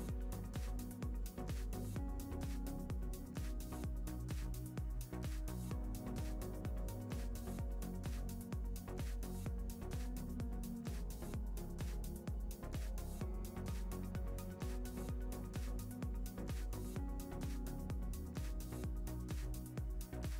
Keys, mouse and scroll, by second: 0.3 KP_0, 0.9-1.4 scroll up 2, 1.1 middle click, 1.6 2, 1.7 shift+click, 2.3-8.2 middle drag, 6.2 Tab, 8.2 click, 9.2-13.3 middle drag, 12.0 scroll down 1, 12.6 KP_0, 12.9-13.3 scroll down 1, 13.3 click, 14.2-19.9 middle drag, 14.4 scroll down 2, 14.4-14.8 scroll up 2, 18.8 g, 20.2 click, 20.3 middle click.